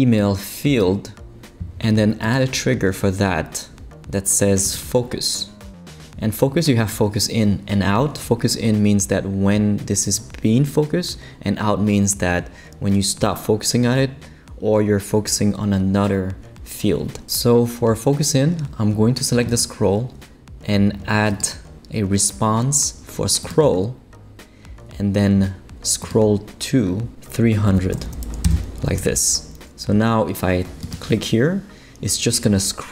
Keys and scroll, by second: 27.7 3, 27.9 0, 28.4 Return.